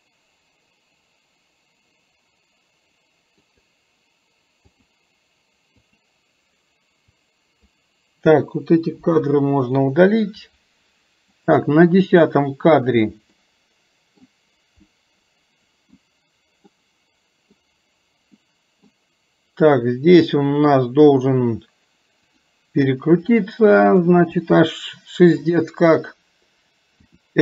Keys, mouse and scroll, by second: 4.7 click, 5.8 click, 7.1-7.7 drag, 11.4 click, 13.4-14.2 middle drag, 14.9-16.1 middle drag, 16.7-17.6 middle drag, 18.5-19.0 middle drag, 22.5 drag, 23.5-24.1 middle drag.